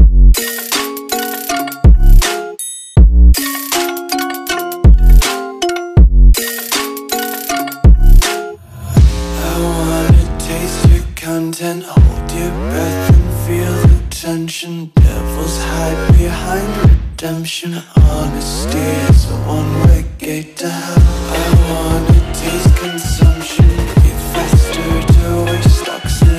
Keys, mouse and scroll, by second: 3.3 click, 12.2 click.